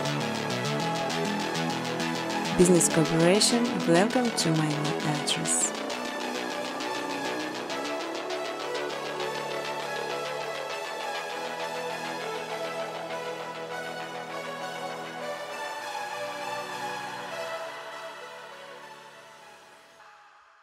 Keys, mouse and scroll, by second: 0.3 click, 2.6 click, 3.5-5.1 typing, 3.6 click, 5.3 click, 5.5 click, 6.7 click, 7.1-8.9 typing, 8.2 click, 8.6 click, 13.2 typing, 15.9 click, 16.1 space, 17.9-20.6 typing.